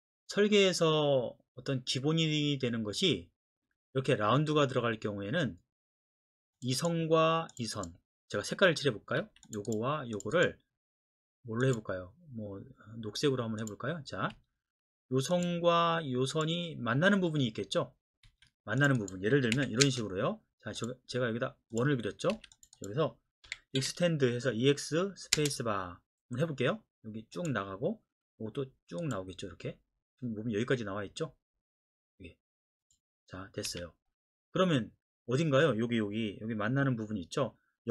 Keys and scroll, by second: 9.2 Escape, 14.3 Escape, 18.3 Escape, 19.6-20.4 typing, 22.3 Escape, 23.5-23.8 typing, 25.3 space, 33.7 Escape.